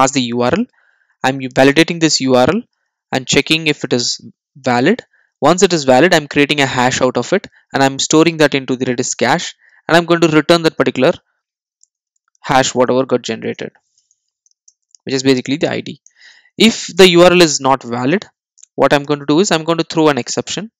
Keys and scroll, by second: 1.4 Return.